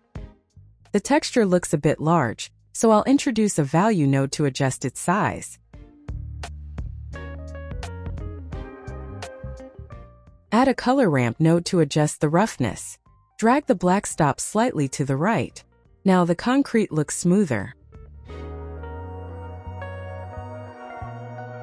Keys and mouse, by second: 1.2 shift+a, 3.3 drag, 3.8 click, 4.8-5.9 drag, 7.8 click, 10.0 shift+click, 10.9 shift+a, 13.9 click, 14.8-16.3 drag, 16.8 click, 19.0 middle click, 20.3 click.